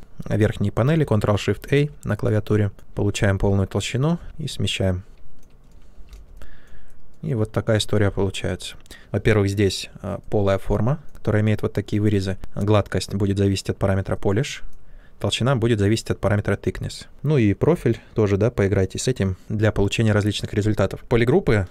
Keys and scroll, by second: 1.5 ctrl+shift+a, 4.1 w, 5.9 shift+f.